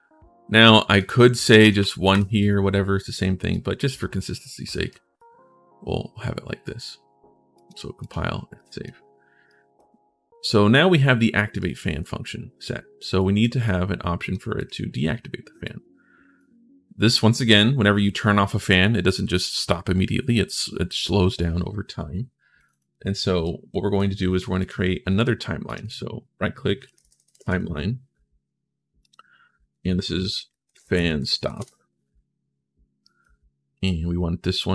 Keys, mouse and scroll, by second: 0.7 alt+click, 1.4 click, 1.6 1, 2.2 right click, 3.3 right click, 4.7 right click, 7.3 right click, 7.8 right click, 8.3 right click, 9.3 right click, 10.3 right click, 11.4 right click, 11.5 click, 13.0 click, 13.0 right click, 13.4 click, 13.4 right click, 14.3 click, 14.3 right click, 15.4 click, 15.4 right click, 22.3 click, 23.2 right click, 24.3 right click, 25.4 right click, 26.4-27.8 typing, 28.8 click, 30.2-31.6 typing, 32.8 right click, 33.6 click, 34.3 click.